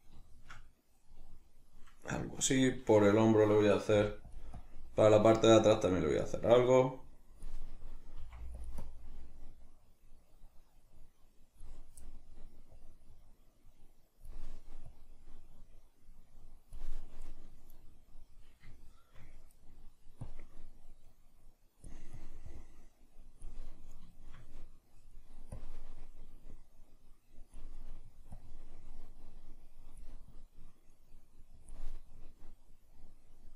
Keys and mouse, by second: 3.9 f, 4.3 click, 8.2 f, 8.6 click, 12.7-17.3 drag, 17.3-20.3 middle drag, 20.3-23.7 drag, 23.7-25.5 middle drag, 25.5-27.7 drag, 27.7-28.3 middle drag, 28.3-33.5 drag.